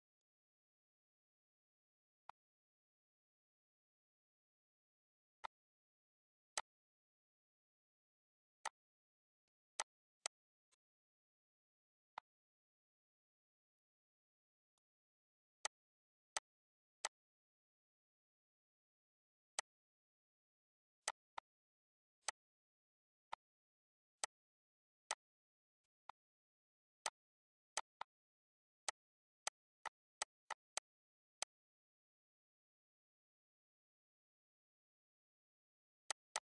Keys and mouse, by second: 1.0 ctrl+s, 3.2 click, 3.7 shift+click, 4.3 click, 6.4 click, 6.8 click, 7.8 click, 8.3 click, 8.9 click, 9.8 click, 10.3 click, 11.4 click, 12.3 click, 13.1 shift+click, 13.8 click, 14.5 click, 14.8 ctrl+s, 16.1 click, 16.5 shift+click, 16.9 ctrl+d, 17.1 click, 18.1 click, 18.5 click, 19.2 ctrl+s, 19.4 z, 19.6 click, 20.2 click, 21.9 click, 22.5 click, 23.6 click, 24.3 click, 25.4 click, 26.1 click, 26.4 click, 28.2 click, 29.7 click, 30.4 click, 30.9 ctrl+s, 32.9 click, 34.1 click, 34.8 ctrl+s.